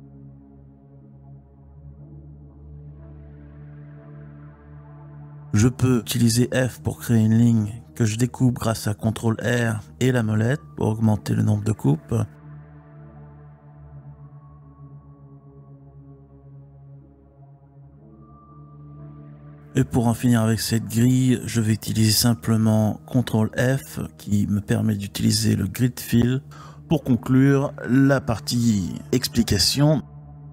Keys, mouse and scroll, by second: 2.4 click, 3.5-5.6 typing, 3.9 click, 6.9 click, 7.7 shift+click, 8.8 f, 10.4 ctrl+r, 14.4 right click, 15.6 click, 17.2-18.5 typing, 19.5-20.8 drag, 21.9 ctrl+f, 29.2 Tab, 30.1 x.